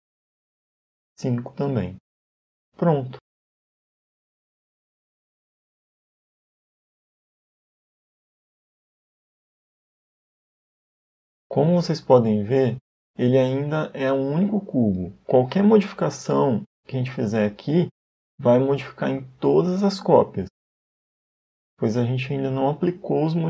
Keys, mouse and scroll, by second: 0.4 click, 0.7 click, 1.5 click, 2.3 scroll down 1, 2.7 middle click, 5.5 shift+middle click, 6.0-6.8 scroll up 1, 7.3 middle click, 9.5 click, 12.3 Tab, 14.3 click, 15.5 scroll up 2, 16.8 right click, 17.6 right click, 18.8 g, 23.2 Tab.